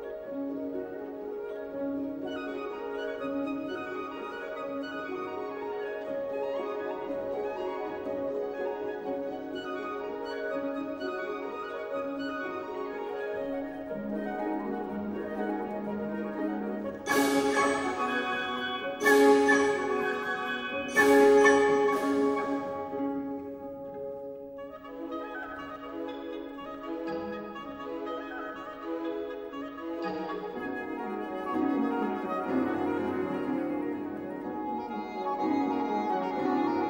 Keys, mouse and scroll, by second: 7.9 click, 14.4 click, 19.7 click, 21.4 click, 22.1-26.6 drag, 28.1-32.1 drag, 36.0 click.